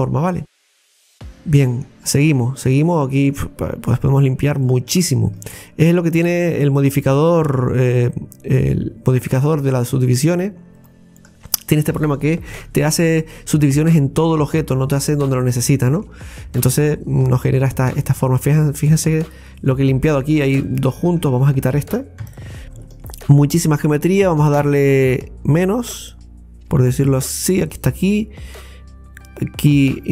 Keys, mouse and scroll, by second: 0.7-1.1 scroll down 2, 1.1-2.1 middle drag, 2.1-2.8 scroll up 5, 2.8-4.3 middle drag, 4.3 right click, 4.6 alt+shift+right click, 4.7 alt+shift+right click, 5.3 alt+shift+right click, 5.9 alt+shift+right click, 7.1 right click, 7.9 alt+shift+right click, 9.2 alt+shift+right click, 10.8 alt+shift+right click, 11.5 alt+shift+right click, 12.5 x, 15.0-15.5 scroll down 2, 15.5 middle click, 16.3-16.6 scroll up 1, 17.5-20.5 middle drag, 20.7 right click, 21.3 right click, 21.5 alt+shift+right click, 22.2 x, 22.9 alt+shift+right click, 24.2 alt+shift+right click, 25.8 right click, 27.6 alt+shift+right click.